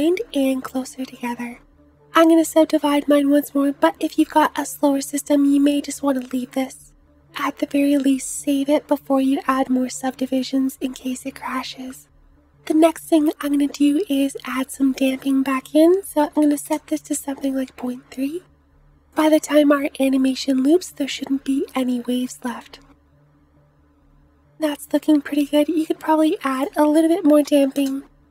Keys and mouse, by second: 0.3 space, 6.8 Tab, 8.3 Tab, 8.8 Tab, 19.4 space, 19.5 space, 23.6-28.3 middle drag, 23.6 space.